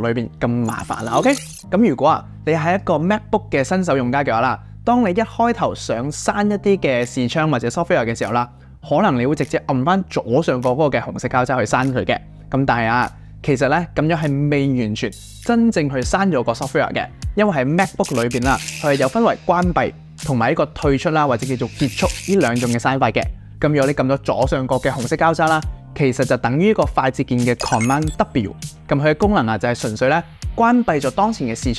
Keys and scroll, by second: 28.2 super+w.